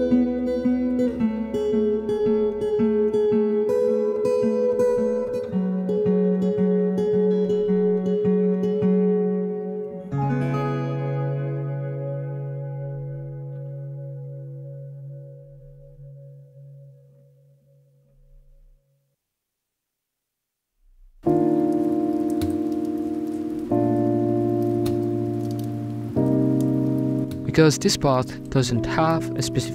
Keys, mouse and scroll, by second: 0.0-1.2 shift+drag, 1.3 middle drag, 1.4 scroll down 2, 1.5 shift+middle click, 2.6 shift+click, 3.6 shift+click, 4.1 scroll down 3, 4.2 middle click, 4.8 scroll up 2, 5.0 click, 5.7 middle click, 5.9 shift+click, 7.2 shift+click, 7.8 scroll down 2, 7.9 middle click, 8.0 scroll up 3, 8.2 right click, 8.5 alt+z, 8.7 right click, 8.9 alt+z, 9.0 middle click, 9.2 scroll down 2, 9.3 right click, 9.7 shift+click, 10.3 scroll up 2, 10.5 right click, 10.8 shift+click, 11.3 shift+click, 11.8 scroll down 1, 11.8 middle click, 11.9 right click, 12.0 middle click, 12.1 scroll up 3, 13.4 shift+click, 13.8 right click, 14.1 shift+click, 15.5 middle click, 15.5 scroll up 4, 15.8 right click, 16.0 shift+click, 16.5 scroll down 3, 16.6 middle click, 16.6 a, 16.7 a, 17.2 right click, 17.3-18.5 shift+drag, 18.8 click, 19.4 a, 19.5 middle click, 19.7 scroll up 3, 19.8 scroll down 5, 19.8 middle click, 20.6-21.0 scroll up 4, 21.6 shift+right click, 21.9 w, 22.9 scroll down 1, 22.9 shift+middle click, 23.2 scroll up 2, 23.3 shift+right click, 23.7 ctrl+j, 24.3 w, 26.4 click, 26.8-27.8 middle drag, 27.8 scroll up 3, 28.1 middle click, 28.3-29.7 typing, 28.8 middle click, 29.6 middle click.